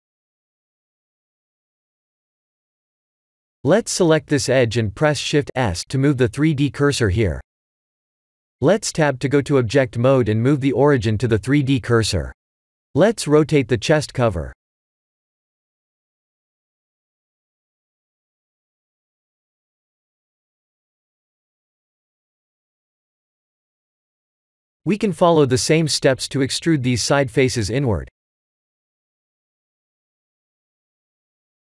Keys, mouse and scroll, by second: 0.6 Tab, 1.3 click, 1.3 1, 1.9 click, 2.2 2, 2.4 click, 4.1 shift+s, 5.5 middle click, 7.3 Tab, 7.9 click, 11.3 KP_3, 11.8 r, 14.6 middle click, 15.8 Tab, 16.1 middle click, 16.5 Tab, 16.8 middle click, 17.3-17.9 scroll down 3, 17.9 click, 18.5 middle click, 24.5 3, 24.7 click, 25.1 middle click, 26.4-27.1 scroll up 3, 26.9 middle click, 27.4 shift+middle click, 27.8 middle click, 28.2 Tab, 28.7 3, 28.8 click, 29.6 shift+click, 30.7 KP_1, 31.5 KP_3.